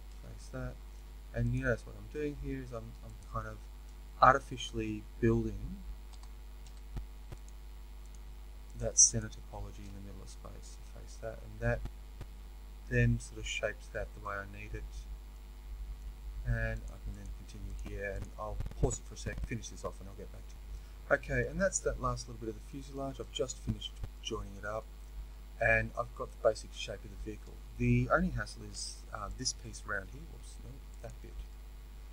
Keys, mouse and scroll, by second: 0.0 f, 1.5 click, 6.0 e, 8.0 shift+click, 10.7 f, 11.1-16.7 middle drag, 16.7 click, 17.1 shift+click, 18.8 middle click, 20.5 f, 20.8-29.3 middle drag, 29.3 alt+click, 31.4-32.1 middle drag.